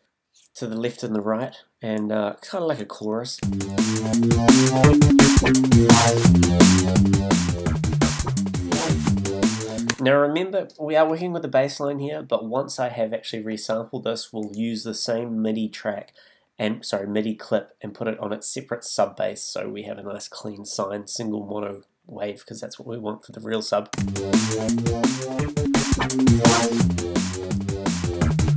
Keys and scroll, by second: 3.4 space, 9.9 space, 23.9 space.